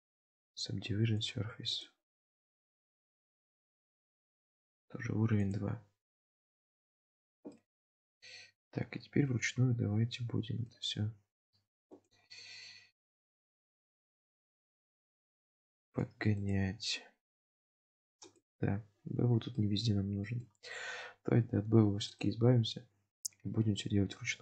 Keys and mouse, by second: 0.2 click, 1.2 drag, 1.8-3.5 drag, 7.6-10.7 middle drag, 12.0 click, 14.1 click, 16.0 click, 16.7 click, 17.8 click, 19.6-20.4 middle drag, 22.1 click.